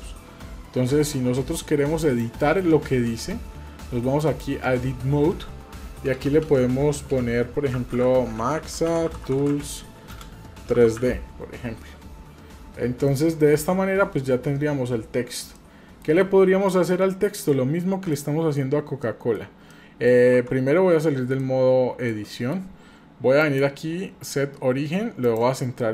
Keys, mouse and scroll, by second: 2.0-4.4 drag, 5.9 BackSpace, 6.1 BackSpace, 8.0-11.0 typing, 11.8-12.3 scroll down 1, 12.3 scroll down 1, 13.1 shift+middle click, 15.6-16.0 middle drag, 16.2-16.9 scroll up 2, 16.9 middle click, 18.1 shift+middle click, 19.0 shift+middle click, 19.4 scroll down 1, 19.7 middle click, 20.4 Tab, 20.9-21.3 scroll down 2, 21.4 middle click, 22.3 shift+middle click, 23.4-25.4 drag, 25.8 middle click.